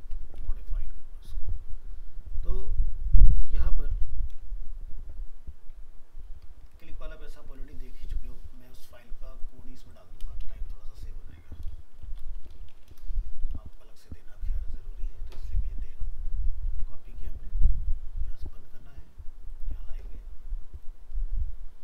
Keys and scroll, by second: 4.0 ctrl+s, 16.7 ctrl+c, 21.2 ctrl+a.